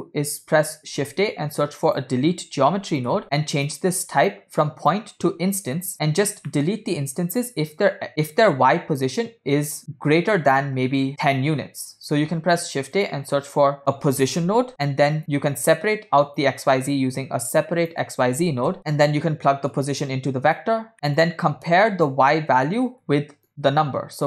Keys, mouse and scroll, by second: 1.0 shift+a, 5.0-6.1 drag, 6.6 middle drag, 9.8 middle drag, 12.3 shift+a, 17.0 shift+a, 18.8 click, 18.8 middle click, 19.8-20.8 drag, 20.9 click, 20.9 scroll up 1, 21.8 click, 23.2 click, 23.6 shift+a.